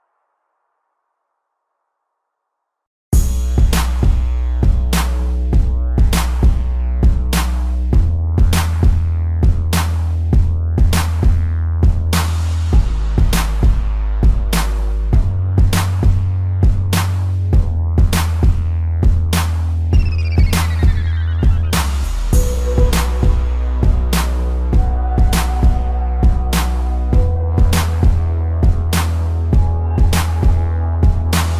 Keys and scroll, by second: 2.0 space, 10.6 space, 12.7 space, 18.7 space, 20.3 space, 24.8 p, 28.4 a, 30.1 ctrl+-, 30.6 space.